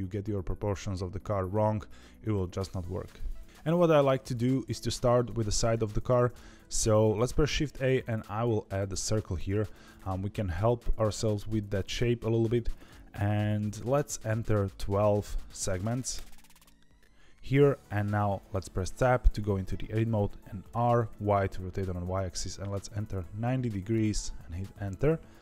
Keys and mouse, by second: 7.6 shift+a, 10.9 click, 12.7-16.9 drag, 18.8 Tab, 20.6 r.